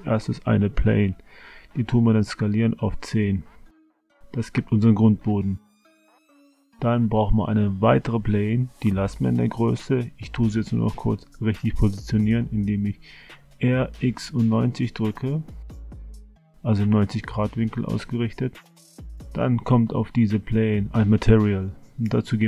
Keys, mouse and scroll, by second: 0.6 s, 3.7 middle click, 4.2 middle click, 5.6 a, 5.8 a, 6.3 shift+a, 10.9 click, 12.5 r, 14.7 KP_Decimal, 16.0-17.0 middle drag, 19.5 click.